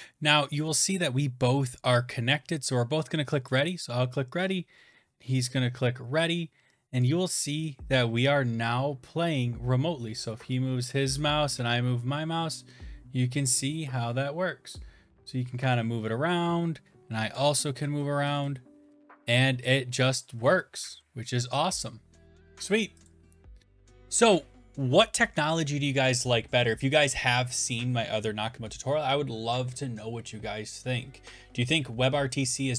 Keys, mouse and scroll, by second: 23.2 Left, 23.2 click.